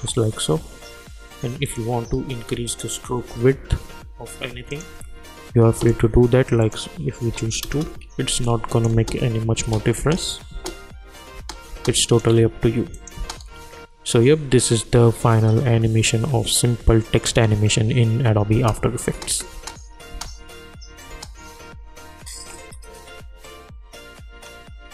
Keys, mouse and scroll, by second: 1.6 click, 2.7 shift+click, 7.6 Return, 8.4 click, 9.0 space, 12.0 click, 13.1 space, 18.5 space.